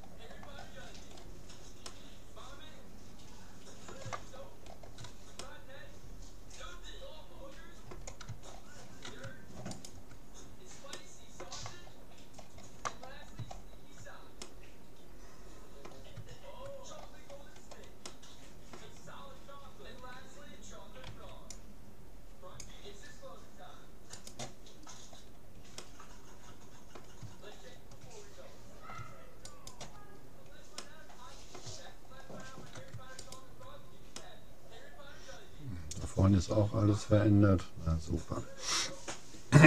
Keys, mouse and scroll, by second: 0.5-2.0 middle drag, 2.4-3.6 middle drag, 4.4-5.4 scroll down 1, 5.4-7.2 middle drag, 8.6-10.8 middle drag, 9.8-11.4 right drag, 11.0 click, 11.4-16.2 middle drag, 16.4-17.0 scroll down 1, 17.0-17.8 scroll up 1, 17.8-19.8 middle drag, 21.2 c, 24.9 middle click, 25.8-26.4 scroll up 1, 26.4-27.4 middle drag, 27.4-29.4 scroll up 1, 29.6-31.2 right drag, 30.2-35.8 middle drag, 33.2-34.8 right drag.